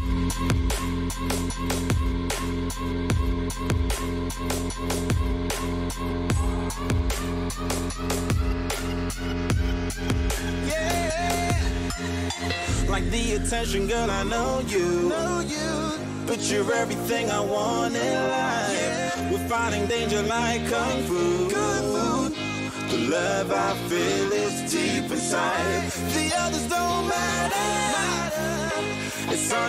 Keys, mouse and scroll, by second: 0.9 a, 1.5-4.1 right drag, 2.6-4.7 drag, 6.2 a, 6.7-9.0 right drag, 9.0-10.9 drag, 10.9 a, 11.3-13.5 right drag, 12.2-14.2 drag, 13.8 a, 14.2-18.2 middle drag, 17.6 Tab, 18.3-20.8 middle drag, 23.9-25.8 middle drag.